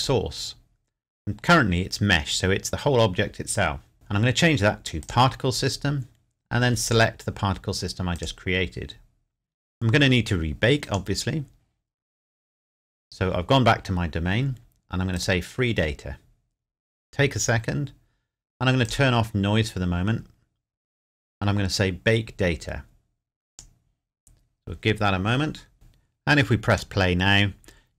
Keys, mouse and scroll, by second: 0.0 click, 3.9 click, 10.8 click, 12.2-12.7 scroll up 1, 15.1 click, 16.5 scroll up 1, 17.7 scroll down 1, 18.8 click, 19.7-21.4 scroll up 1, 23.5 click, 26.7 click.